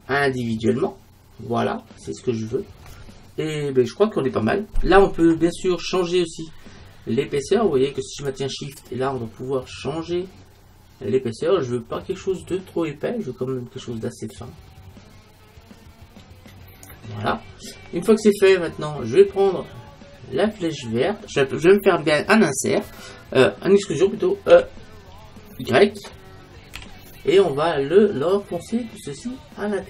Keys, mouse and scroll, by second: 0.4-2.3 drag, 8.4-10.2 drag, 19.0-20.9 middle drag, 24.6 e.